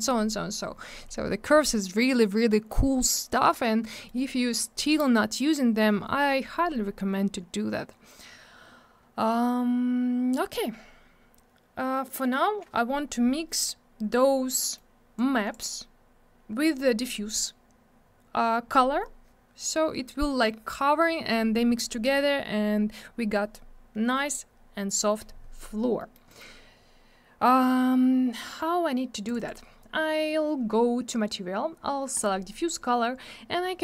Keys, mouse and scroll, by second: 1.3 scroll down 1, 3.2 middle click, 3.4 middle click, 3.9 middle click, 4.0 middle click, 4.5 click, 10.6 scroll down 1, 14.5 middle click, 14.7 middle click, 15.1 click, 25.9 middle click, 26.1 middle click, 26.2 middle click, 26.3 double middle click, 29.2 click, 29.3 click, 29.3 click, 29.4 double click, 32.1 click, 32.2 click, 33.3 scroll up 1.